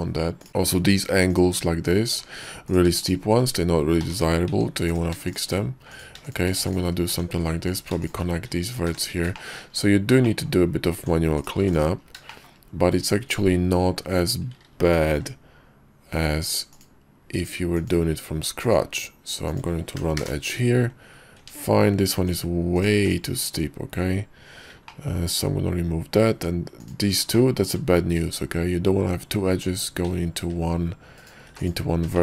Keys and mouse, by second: 0.7 middle click, 0.9 Tab, 1.4 click, 2.2 Tab, 2.8 click, 3.1 shift+click, 4.1 j, 4.6 Tab, 5.0 click, 5.4 shift+click, 6.0 click, 6.5 shift+click, 6.7 x, 7.2 Tab, 7.8 click, 8.1 shift+middle click, 9.0 j, 9.5 shift+middle click, 10.4 shift+middle click, 11.1 Tab, 11.5 click, 11.7 x, 12.3-14.2 shift+middle drag, 15.2 k, 21.5 Tab, 22.3 Tab, 22.9 click, 23.1 x, 25.0 middle click, 26.4 Tab, 26.9 click, 27.4 shift+click, 30.5 c, 31.6 x.